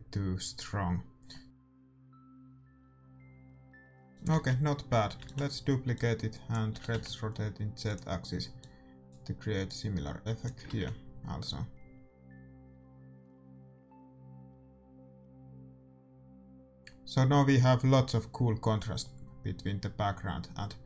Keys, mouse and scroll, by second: 4.1-7.7 drag, 4.4 shift+z, 5.2 shift+d, 6.7 r, 8.5-12.1 drag, 12.1 shift+z.